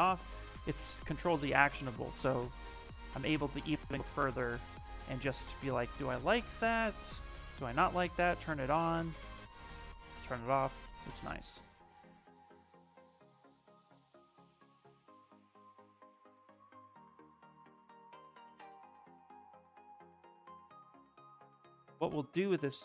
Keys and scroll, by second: 5.5 ctrl+shift+z, 15.1 s, 21.1 s.